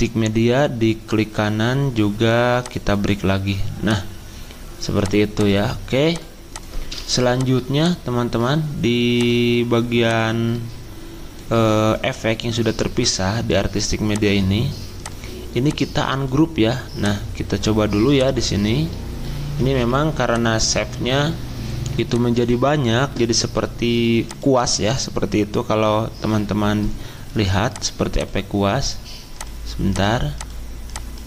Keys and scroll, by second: 19.7 z.